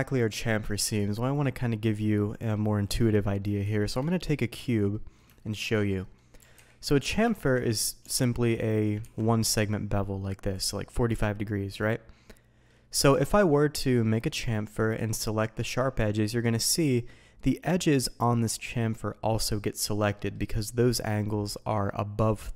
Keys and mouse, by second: 0.7 Tab, 1.6 middle drag, 2.3 middle drag, 2.8 middle click, 3.6 shift+a, 4.9 middle drag, 5.4 shift+middle drag, 6.0 middle click, 6.4 g, 6.5 x, 7.0 click, 7.3 shift+drag, 7.6 drag, 8.0 Tab, 9.0 ctrl+b, 10.5 click, 11.8-12.6 middle drag, 13.2 alt+a, 15.0-16.2 drag, 16.5 middle click, 20.1 middle drag.